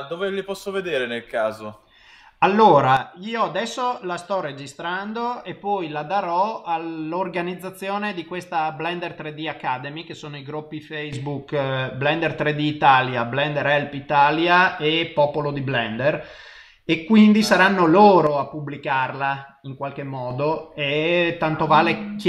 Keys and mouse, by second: 4.3 middle click.